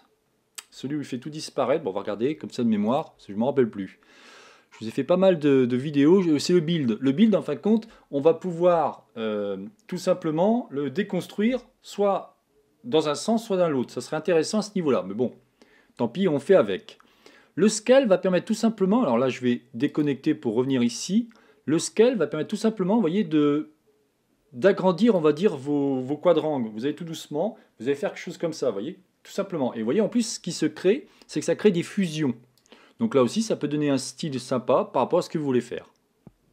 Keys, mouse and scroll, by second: 3.9 click, 20.6 click, 22.2 click, 33.0 click.